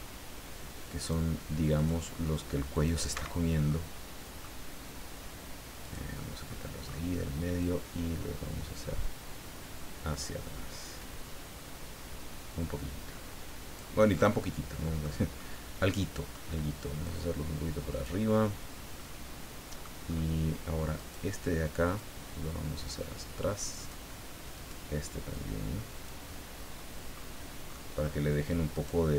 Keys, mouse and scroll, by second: 1.7 click, 2.7 click, 3.1 Escape, 3.4 scroll down 1, 3.7 middle click, 5.8 click, 6.2 scroll down 1, 6.5 middle click, 7.6-9.4 drag, 9.4-10.0 scroll down 1, 10.7-11.0 scroll down 2, 11.4-11.7 scroll up 2, 12.1 scroll up 2, 14.2-15.2 middle drag, 15.4-16.5 middle drag, 17.0 click, 19.0-20.0 middle drag, 20.0 scroll up 2, 20.9 right click, 21.9-24.1 drag, 24.5 right click, 25.3 click, 26.3-27.3 middle drag, 27.7 middle click, 28.7 right click.